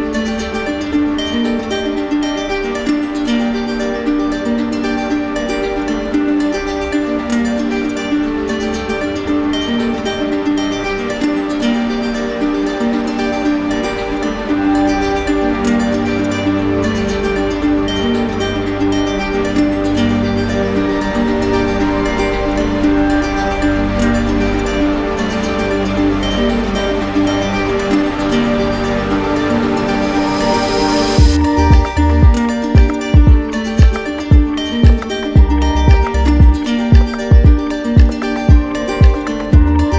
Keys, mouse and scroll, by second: 11.3-12.3 right drag, 14.8-15.9 drag, 16.5-17.6 drag, 23.7 click, 30.7 click, 32.9 ctrl+d, 34.2 ctrl+z.